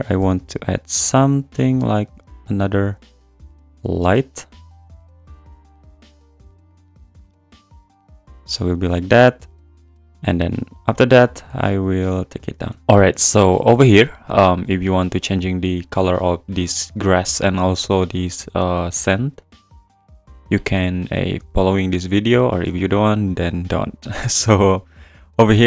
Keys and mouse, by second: 0.3 g, 6.9 click, 11.4 g, 12.7 click, 12.8 n, 14.0 click, 15.8 click, 18.0 click, 19.6 click, 21.7 click.